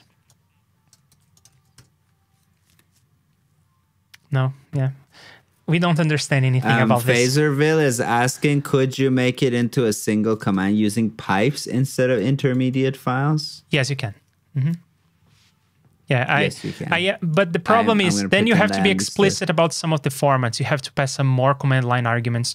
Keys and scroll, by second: 1.1 super+c, 1.5 super+v.